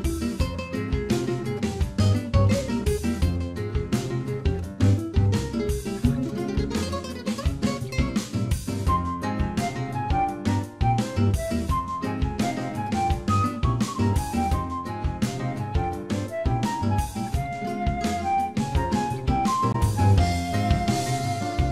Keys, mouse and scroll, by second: 1.1 click, 6.6 click, 10.5-11.1 scroll up 3, 11.0 shift+middle click, 14.3 click, 15.6 shift+click, 18.5-18.9 scroll down 5, 19.1 click, 19.4 middle click.